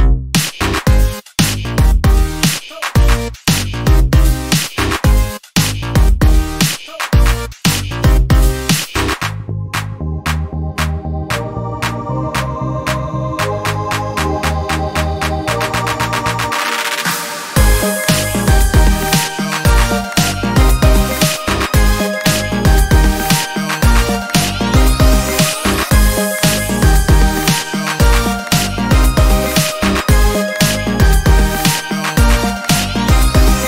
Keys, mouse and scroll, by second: 2.1-4.2 drag, 7.1 click, 8.7-11.6 drag, 12.5-14.6 drag, 15.4-16.9 drag, 18.4-18.8 ctrl+scroll up 2, 20.2-25.2 ctrl+drag, 26.0 click, 29.2 ctrl+click, 29.3-30.3 ctrl+scroll down 4, 30.7 ctrl+scroll down 2, 31.3 ctrl+space, 32.7-33.4 ctrl+scroll up 4.